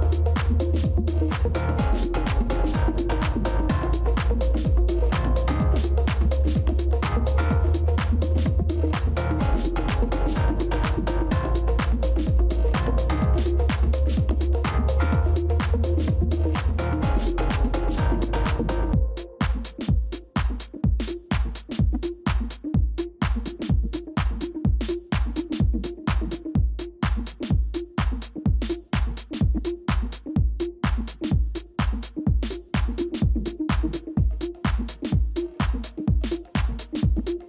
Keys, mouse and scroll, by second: 0.0 ctrl+z, 1.4-1.8 scroll up 1, 3.6 ctrl++, 3.8 ctrl++, 7.3 ctrl+-, 7.5 ctrl+-, 7.6 ctrl+-, 8.8 alt+click, 10.1 alt+click, 17.9 ctrl++, 18.8 ctrl+-, 19.4 space, 20.3 alt+click, 22.0 shift+click, 25.6 shift+click, 32.2 space.